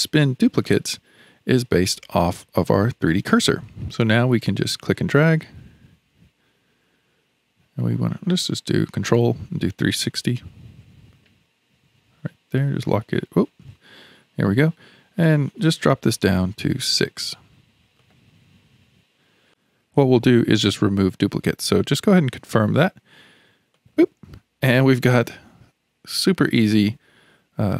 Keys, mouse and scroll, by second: 0.5-1.4 scroll down 2, 4.9 drag, 15.2-18.9 drag, 23.8 click, 24.3-24.7 scroll down 3, 24.7-27.7 middle drag.